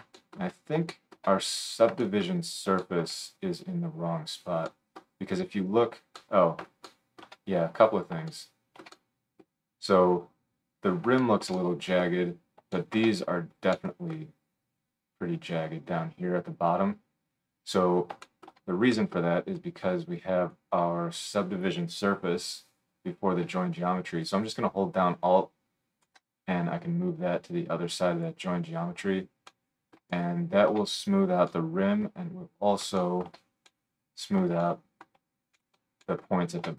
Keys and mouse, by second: 7.2-21.3 shift+middle drag, 21.3-24.2 drag, 24.2-36.7 alt+middle drag.